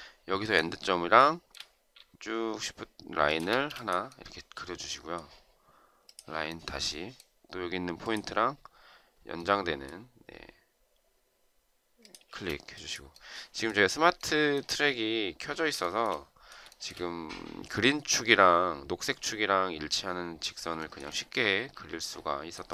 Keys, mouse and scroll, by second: 1.0 shift+right click, 3.1 shift+click, 3.3 space, 12.1 space, 15.6 shift+right click, 16.5 shift+right click, 20.6 shift+right click.